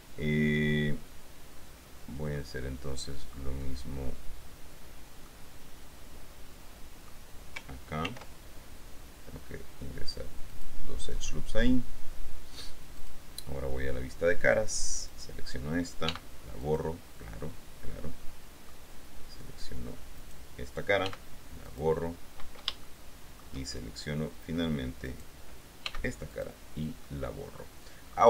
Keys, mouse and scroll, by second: 2.6-3.7 drag, 5.4-7.4 drag, 8.2 ctrl+r, 10.6-12.0 drag, 13.1 click, 15.2 middle click, 16.2 x, 16.8 click, 17.6 middle click, 18.4 click, 20.4 right click, 21.2 x, 21.8 click, 23.0-24.5 shift+drag, 25.4 right click, 26.0 x, 26.5 click, 26.7 middle click, 26.8 click, 27.2-28.2 middle drag.